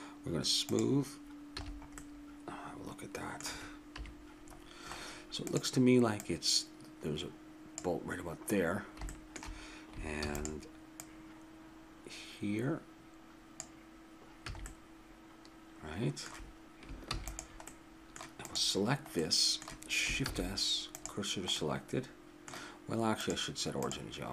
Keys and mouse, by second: 0.7 click, 1.6 a, 2.0 middle click, 2.4 middle click, 3.0 middle click, 3.9 KP_3, 5.5-8.2 drag, 9.8 middle click, 10.1 shift+d, 10.2 middle click, 11.0-13.4 drag, 14.5 a, 14.7 middle click, 17.0 ctrl+s, 18.5 click, 20.2 shift+s, 23.2-24.3 drag.